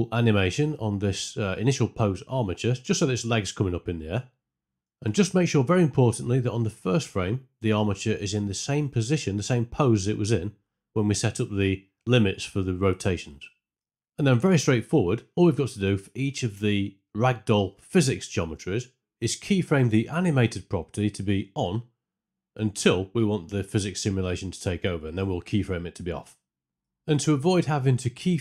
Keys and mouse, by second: 0.0-1.9 typing, 0.0 Right, 0.2 Left, 0.8 Right, 1.7 shift+Left, 3.7 click, 3.8-5.3 typing, 4.0 click, 4.3 click, 6.5 shift+Left, 13.3 click, 14.4 middle click, 22.8 alt+click.